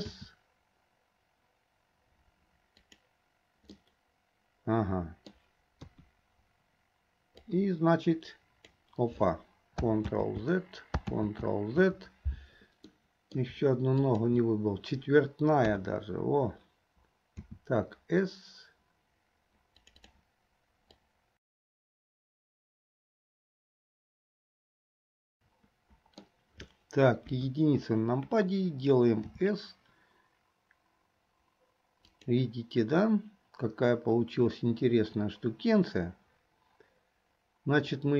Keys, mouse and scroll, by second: 0.2 s, 4.0-5.5 middle drag, 6.3 KP_3, 7.7-8.9 drag, 10.2 ctrl+z, 11.2 ctrl+z, 13.0-13.5 middle drag, 14.1 shift+click, 15.7 KP_3, 18.4 s, 20.1 click, 21.2-23.2 drag, 24.6-26.4 middle drag, 27.3 KP_1, 29.3 s, 37.9 click.